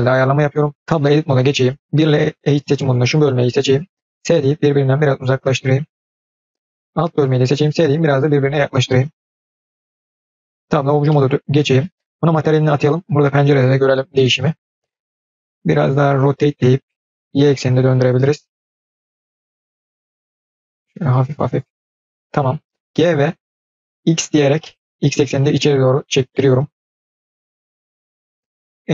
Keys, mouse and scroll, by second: 0.2-0.8 scroll up 2, 0.8 middle click, 0.8 scroll down 2, 0.9 Tab, 1.8 1, 2.1 click, 4.0 s, 6.3-6.9 scroll down 2, 6.9 click, 7.5 s, 10.5 Tab, 10.9 middle click, 12.1 click, 13.4-13.8 scroll up 2, 13.8 scroll down 1, 14.0-15.6 middle drag.